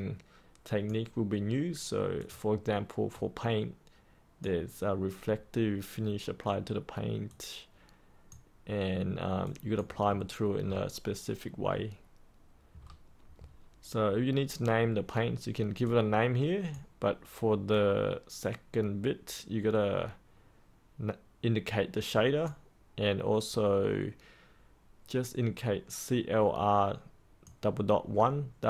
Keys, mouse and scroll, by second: 10.1-12.7 scroll down 1, 12.7-15.0 scroll up 1, 15.8-28.6 drag.